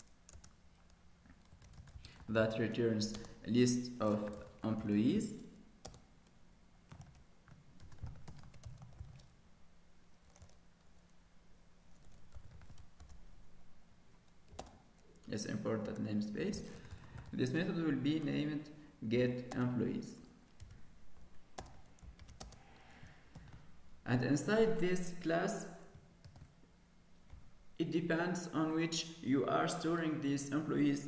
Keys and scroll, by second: 15.1 alt+Return, 23.6 ctrl+s, 26.4 ctrl+s.